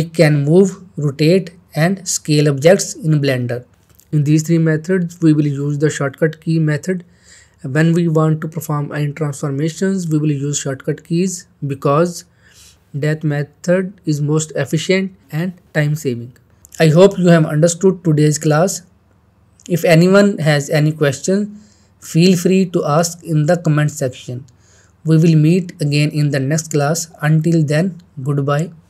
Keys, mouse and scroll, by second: 2.2-3.0 middle click, 3.2 middle click, 6.5 click, 7.8 middle click, 8.3-9.2 shift+middle click, 9.0 shift+middle click.